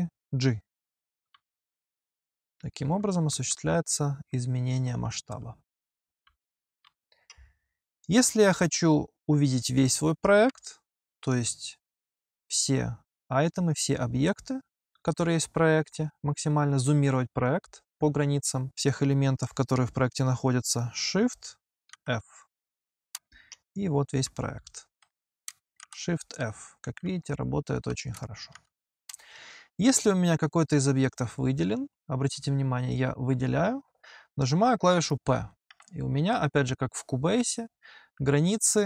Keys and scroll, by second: 0.8 g, 3.1 h, 4.8 g, 10.3 g, 21.7 shift+f, 24.3 h, 25.6 shift+f, 27.1 g, 28.3 shift+f, 35.6 p.